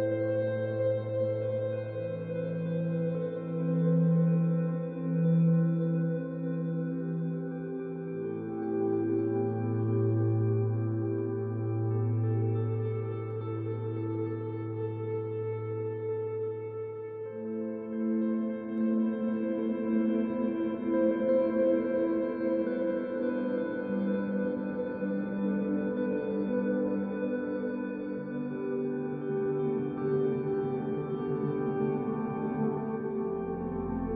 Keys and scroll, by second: 3.2 f, 9.6 e, 9.7 e, 10.2 ctrl+alt+1, 10.4 b.